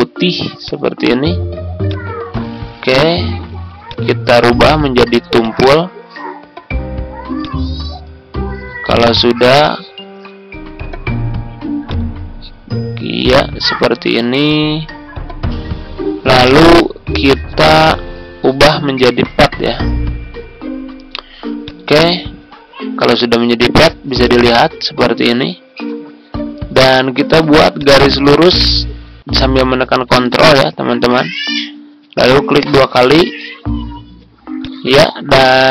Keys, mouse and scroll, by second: 8.5 scroll down 1, 8.7-9.5 scroll up 1, 9.5 click, 32.6 ctrl+click, 32.8 ctrl+click, 34.5 click, 35.3 ctrl+scroll up 1.